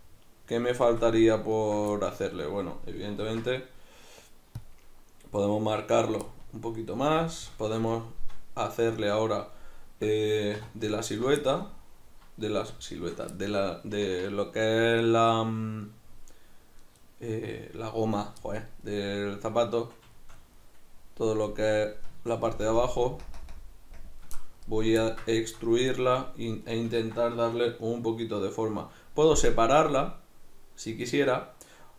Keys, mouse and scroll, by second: 3.3 ctrl+r, 6.1 right click, 6.3-11.1 middle drag, 10.6 3, 11.1 alt+right click, 11.5-31.9 shift+middle drag, 22.5 ctrl+KP_Add, 23.0 ctrl+KP_Subtract, 24.0 ctrl+KP_Add.